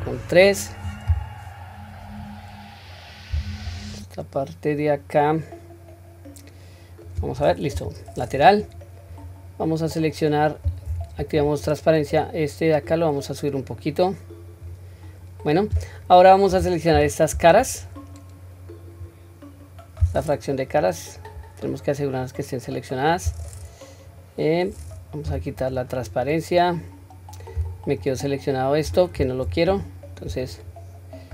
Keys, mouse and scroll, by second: 3.4-7.2 middle drag, 7.7 KP_3, 8.6-9.2 scroll up 1, 9.9 click, 10.9 q, 11.5 click, 11.7 click, 12.9-14.7 drag, 17.6-19.0 drag, 20.8-22.2 scroll down 2, 21.2-23.4 middle drag, 25.8 scroll down 1, 25.8 q, 26.2 middle click, 28.0 alt+click, 29.8 ctrl+z, 30.5 ctrl+click.